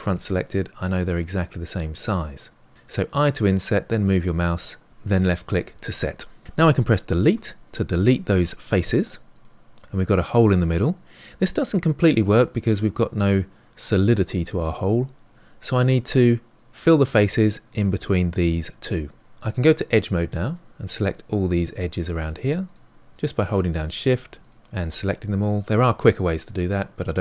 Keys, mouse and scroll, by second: 7.3 Delete, 9.9-13.0 middle drag, 15.4-18.8 middle drag, 19.1 middle click, 19.2 click, 20.2 click, 21.1 click, 21.5 shift+click, 21.8 shift+click, 22.2 shift+click, 22.6 middle click, 23.2 shift+click, 23.4 shift+click, 23.8 middle click, 24.3 shift+click, 24.6 middle click, 24.8 shift+click, 25.6 shift+click, 26.4-27.2 middle drag.